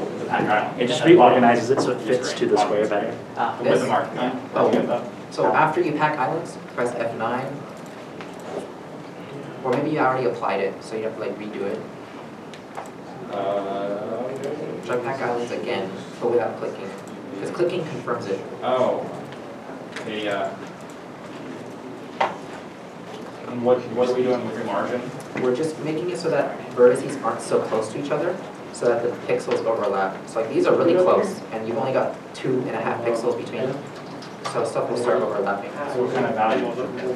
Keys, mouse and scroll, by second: 7.3 F9, 13.3 F9, 18.9 F9, 19.1 ctrl+z, 22.8 scroll, 22.8 scroll up 1, 24.3 scroll down 1, 26.0 scroll down 1, 26.0 scroll up 1, 27.0-27.4 scroll up 1, 28.0 shift+middle click, 28.4 scroll up 1, 30.3 shift+middle click, 30.5 scroll up 1, 33.4 scroll down 1, 34.3-35.4 scroll up 1.